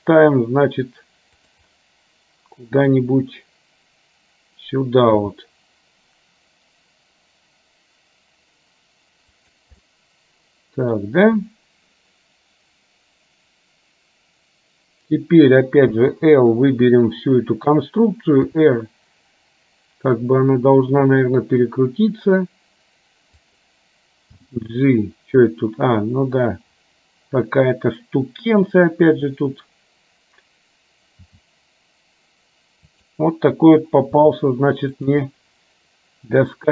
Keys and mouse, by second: 1.7-3.1 middle drag, 5.3 g, 9.9-11.1 middle drag, 18.6 r, 24.4 g, 31.3 r, 34.2 g, 35.3-36.7 middle drag.